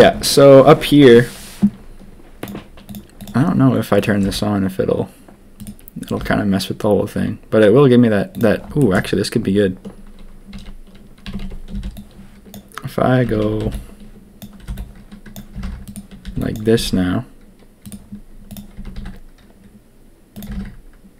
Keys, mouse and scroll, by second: 4.2 g, 6.1 g, 8.8 shift+middle click, 10.5 a, 11.2 a, 11.4 a, 11.7 b, 13.2 a, 13.3 a, 13.6 b, 14.6 b, 15.5 g, 16.2 b, 16.7 s, 18.4 click, 18.7 s, 20.4 g.